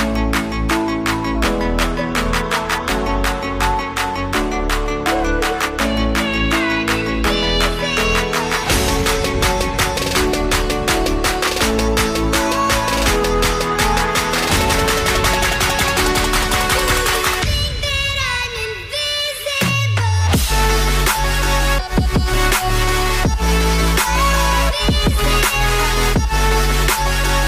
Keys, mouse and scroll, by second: 5.1 shift+click.